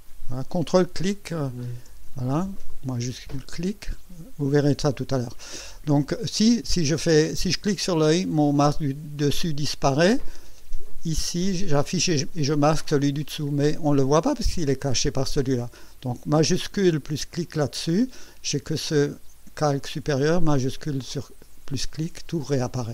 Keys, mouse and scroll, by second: 0.0 ctrl+click, 1.4 ctrl+click, 2.9 shift+click, 3.5 shift+click, 7.8 click, 9.7 click, 10.9 click, 11.7 click, 12.3 click, 12.8 click, 13.6 click, 14.0 click, 17.3 shift+click, 21.1 shift+click.